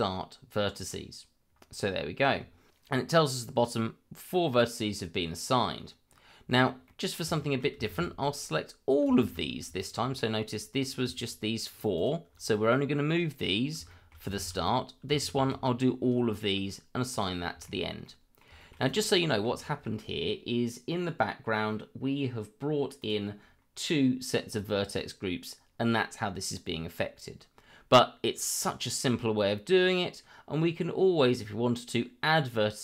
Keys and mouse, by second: 6.8 middle click, 7.3 shift+middle click, 7.9 shift+z, 8.4 click, 9.7 shift+middle click, 10.1 middle click, 10.8 click, 11.1 shift+click, 11.9 shift+click, 12.5 middle click, 13.9 shift+middle click, 14.3 shift+z, 14.6 click, 17.1 click, 17.6 shift+middle drag, 18.0-18.4 middle drag, 18.2 z, 18.6 shift+middle drag, 18.8 click, 19.1 middle click, 19.6 shift+middle drag, 23.0 click.